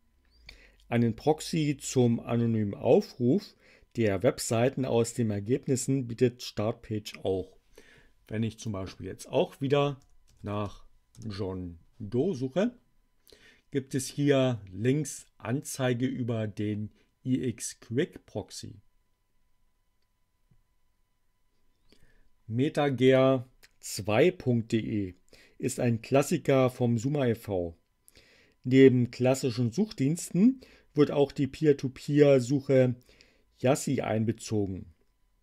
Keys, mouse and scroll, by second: 8.5 click, 9.2-11.0 typing, 22.9 click.